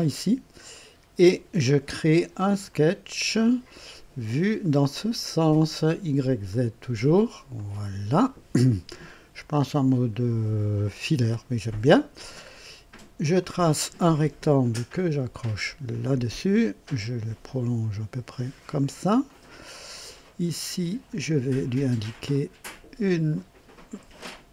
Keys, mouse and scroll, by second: 0.7-1.4 right drag, 2.6 click, 6.4 click, 7.5 click, 13.3 click, 15.8 click, 18.5 click, 19.2 right click, 21.0 click, 22.3 click.